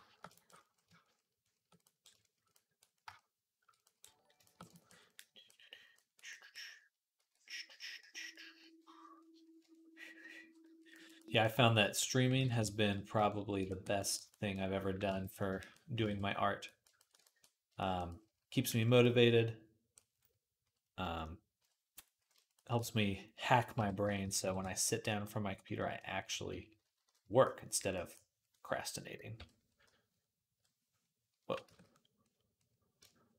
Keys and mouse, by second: 0.4-15.5 drag, 7.0 d, 12.2 ctrl+z, 14.9 ctrl+Tab, 15.8 ctrl+Tab, 17.5-19.4 shift+drag, 19.5-21.4 drag, 21.4 KP_3, 21.5-26.7 drag, 23.6 [, 24.1 ], 24.3 ], 24.4 ], 26.1 [, 26.3 [, 26.5 [, 26.7 [, 29.2 |, 29.7-30.4 ], 31.4-33.3 ctrl+drag, 31.5 ctrl+z.